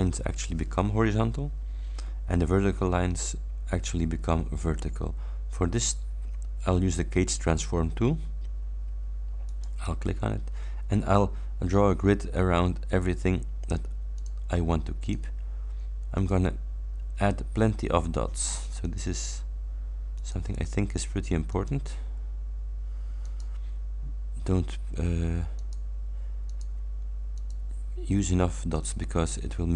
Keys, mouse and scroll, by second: 3.3 scroll up 1, 3.8 scroll down 1, 9.5 click, 12.4 scroll up 1, 14.2 click, 15.1 click, 16.2 click, 18.9 click, 20.2 click, 21.5 click, 23.3 click, 24.1 scroll down 1, 25.6 click, 26.5 click, 27.4 click, 28.8 click.